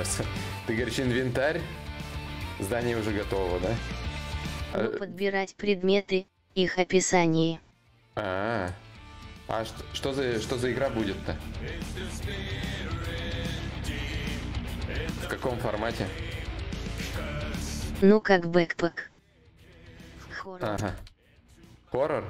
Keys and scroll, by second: 10.8 4, 11.6 4, 18.9 shift+d, 19.5 shift+d, 19.9 shift+d, 20.5 d.